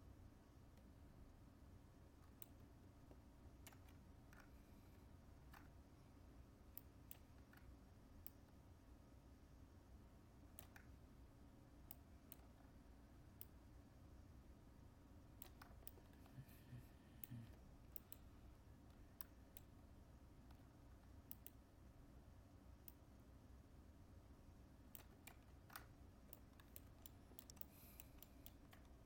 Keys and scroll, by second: 3.6 ctrl+z, 25.2 ctrl+z.